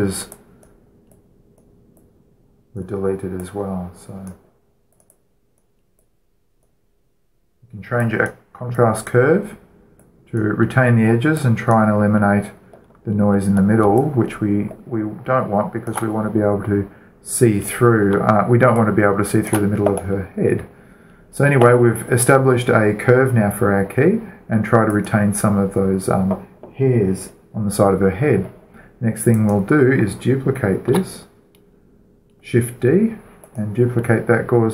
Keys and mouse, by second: 0.9-14.1 drag, 14.3-16.4 middle drag, 16.6-23.3 alt+shift+middle drag, 25.8-27.7 drag, 30.2-32.0 right drag, 31.8 shift+d, 34.3-34.7 drag.